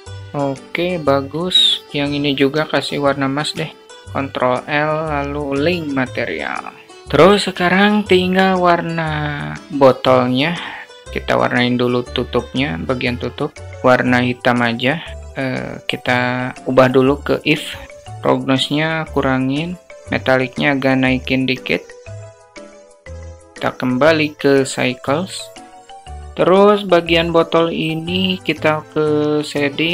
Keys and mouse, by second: 1.0 click, 2.0 shift+click, 2.9 shift+click, 4.0 ctrl+l, 7.0 alt+shift+middle drag, 8.5 click, 15.8-18.0 drag, 18.2-19.6 drag, 19.9-21.1 drag, 23.0-26.1 drag.